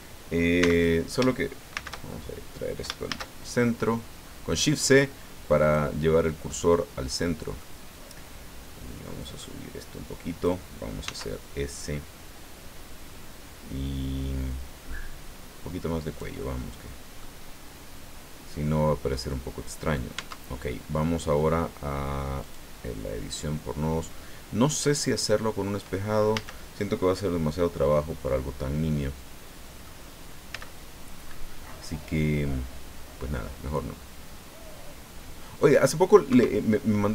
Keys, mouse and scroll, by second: 0.6 x, 0.7 click, 1.7 shift+c, 3.1 shift+a, 5.6 click, 6.5-7.7 middle drag, 9.2-10.6 drag, 11.0 s, 16.0 click, 16.4 middle click, 19.3 middle click, 20.1 Tab, 22.4 click, 26.3 a, 27.0-30.0 drag, 30.5 c, 31.2-31.7 scroll up 1, 31.7-32.8 scroll down 4, 32.3 middle click, 32.8-35.0 middle drag, 35.6 click, 36.3 Escape, 36.7-37.1 drag.